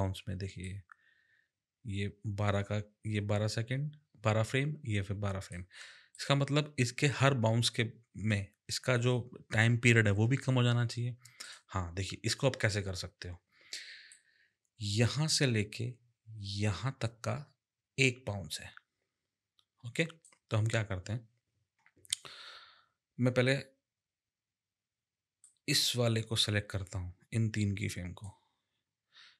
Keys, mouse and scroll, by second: 0.6 click, 6.1 click, 11.4 click, 14.1 click, 25.4 click.